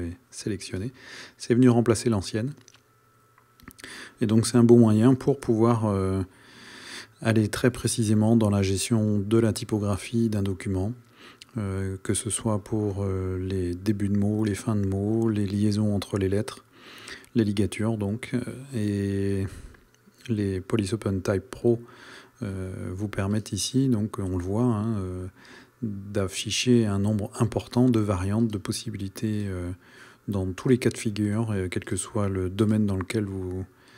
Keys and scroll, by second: 5.9 super+KP_0.